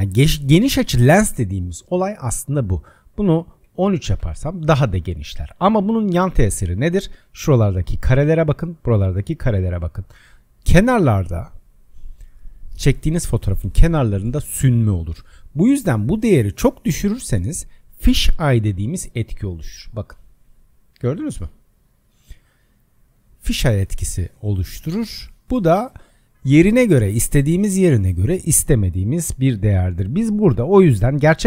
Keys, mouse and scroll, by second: 2.8-5.9 drag, 16.0-19.3 drag, 19.3-21.5 scroll up 20, 21.5-22.4 scroll down 13, 22.4-23.2 scroll up 14, 23.5-24.1 scroll down 13, 24.2-24.8 scroll up 6, 24.9-25.2 scroll down 4, 25.6-25.9 scroll down 12, 25.9-26.4 scroll up 5, 28.5-31.4 drag.